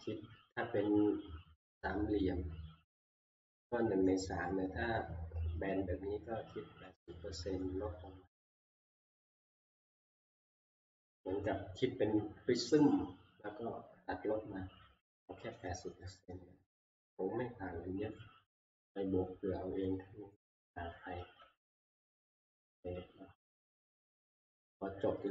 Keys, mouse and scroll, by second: 7.6 middle click, 8.0 scroll down 2, 9.3 middle click, 9.4 middle click, 15.7 middle click, 16.1 shift+middle click, 16.7 ctrl+middle click, 16.9 ctrl+s, 18.7 shift+middle click, 19.3 middle click, 19.4 middle click, 19.5 shift+middle click, 20.3 shift+middle click, 20.3 scroll down 2, 21.8 middle click, 22.4 ctrl+s, 24.1 click.